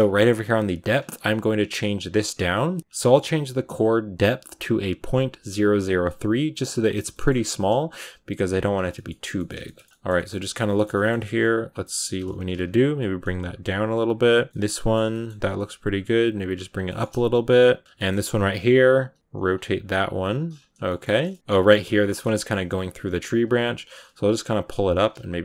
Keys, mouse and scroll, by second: 2.6 scroll up 1, 2.8 click, 2.8-6.7 middle drag, 6.7 click, 7.0 middle click, 7.1-8.3 scroll up 3, 8.3 right click, 8.6 scroll down 3, 8.8 middle click, 9.0 Tab, 9.3-11.5 shift+middle drag, 11.5 right click, 11.7 middle click, 12.0 scroll up 1, 12.2 s, 12.8 g, 13.0 r, 13.3 g, 14.4 right click, 14.5 shift+middle click, 14.6 scroll up 1, 14.6 middle click, 15.3 g, 15.9 r, 16.2 g, 16.5 scroll down 4, 16.7 shift+middle click, 17.5-17.8 scroll up 1, 17.8-19.2 middle drag, 19.2 r, 19.5 g, 20.0 r, 20.2 g, 20.6 scroll down 3, 20.7 shift+middle click, 21.3 right click, 21.7 scroll up 2, 21.9-23.3 middle drag, 23.3 right click, 23.7 g, 24.5 g, 24.8 s.